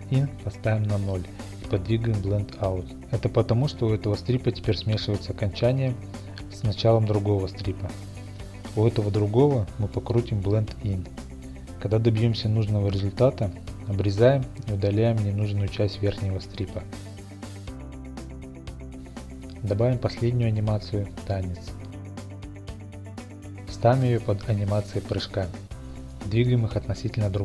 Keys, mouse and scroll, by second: 0.2 0, 0.3 Return, 1.8 click, 2.3-2.7 middle click, 2.5 middle click, 2.8 middle click, 3.2 middle click, 5.6 click, 6.0 click, 6.7 click, 9.9 click, 10.3 click, 12.0-14.0 drag, 16.4 click, 16.8 click, 18.0 y, 18.5 click, 19.1 scroll, 19.7 n, 19.9 scroll, 20.3 click, 21.0 click, 21.3 click, 21.8 click, 22.0 g, 22.4 click, 22.5-22.9 scroll, 23.3 a, 23.5 click, 24.4 click, 25.7 click, 26.0 click, 26.1 s, 26.4 click.